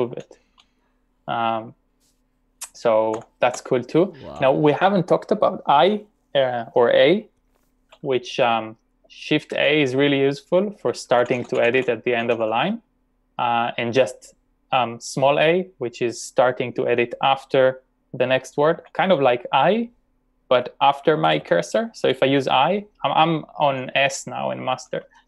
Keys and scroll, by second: 0.2 d, 3.2-3.5 typing, 9.5 shift+a, 10.9-11.7 typing, 13.6-14.3 typing, 18.7 a, 21.3 typing, 23.7-24.4 typing.